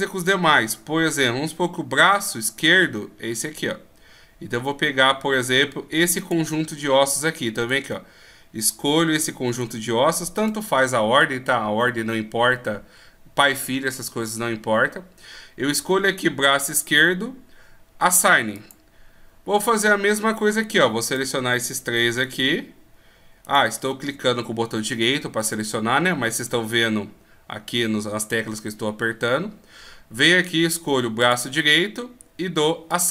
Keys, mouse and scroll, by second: 6.2 click, 7.6 right click, 9.6 shift+right click, 10.4 right click, 16.7 click, 21.0 right click, 22.2 shift+right click, 23.4 shift+right click, 31.2 click, 32.9 click.